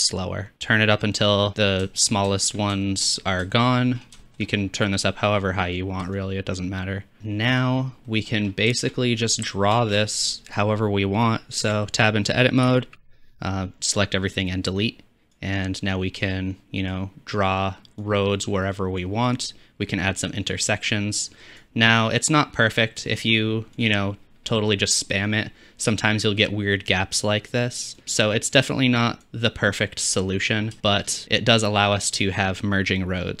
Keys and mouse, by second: 1.9-3.2 shift+middle drag, 3.4 shift+middle click, 4.2-7.2 shift+drag, 7.6 click, 8.1-8.5 middle drag, 8.8-12.0 shift+drag, 9.9 ctrl+space, 11.7 Tab, 12.0 middle click, 12.7 a, 13.1 x, 23.1 shift+middle click, 29.9 middle click.